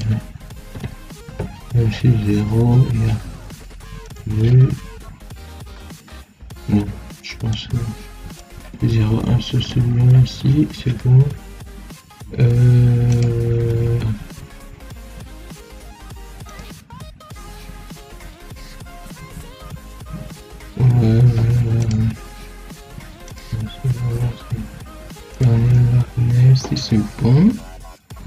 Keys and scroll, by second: 0.6 2, 9.5 1.